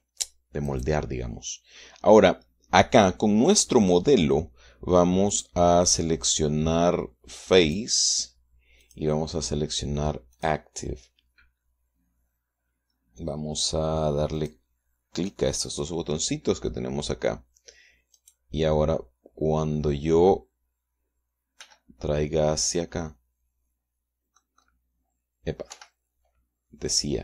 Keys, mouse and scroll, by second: 1.4 click, 6.0 click, 8.3 click, 9.5 click, 11.0 click, 15.0 click, 15.9 click, 18.8 click, 22.3 g, 25.2 click, 26.4 Escape.